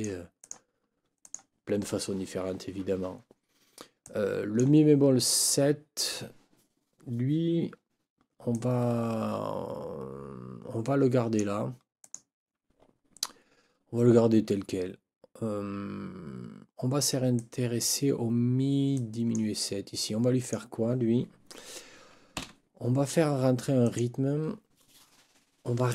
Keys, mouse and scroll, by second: 0.0 middle click, 0.4 middle click, 1.2 middle click, 4.0 middle click, 8.5-11.6 drag, 12.0 click, 17.4 click, 18.9 click, 20.4 click, 22.4 Delete, 23.8 click.